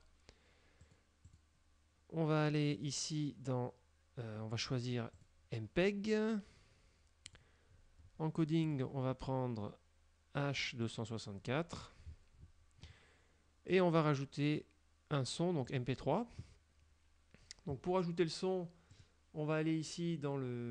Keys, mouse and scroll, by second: 0.9 click, 1.3 click, 2.8 click, 5.2 click, 7.4 click, 7.8-8.4 scroll down 2, 8.7 click, 10.9 click, 11.5-12.7 scroll down 5, 13.8 click, 15.8 click, 19.0 click.